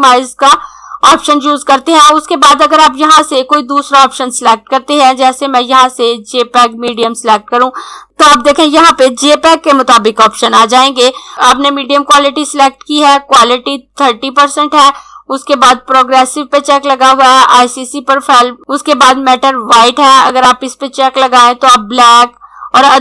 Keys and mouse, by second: 3.1 click, 6.6 click, 20.2 click.